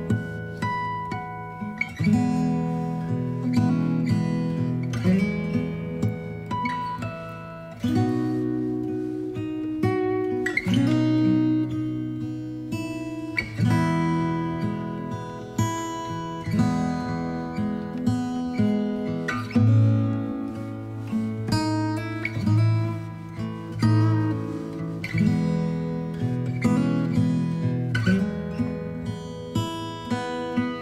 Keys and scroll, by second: 10.3 ctrl+shift+e, 11.0 space, 17.1 space, 19.3 alt+b, 25.4 ctrl+z.